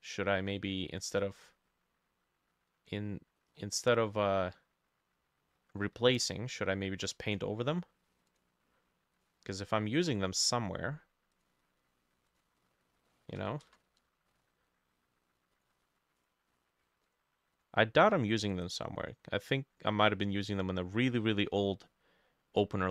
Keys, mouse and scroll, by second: 3.5-5.7 scroll down 6, 13.1 middle click, 13.6 ctrl+n, 14.3 Escape, 16.2 right click, 18.5 right click.